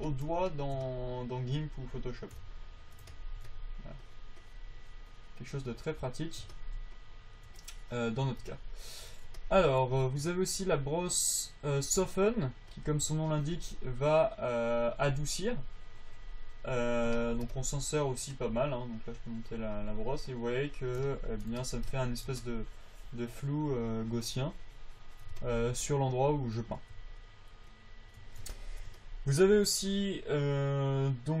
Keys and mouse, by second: 7.4-8.9 drag, 13.1 click, 13.3 click.